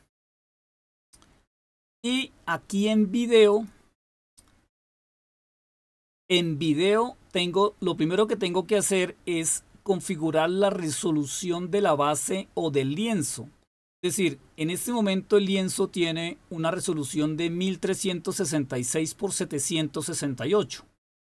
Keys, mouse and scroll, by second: 3.6 click.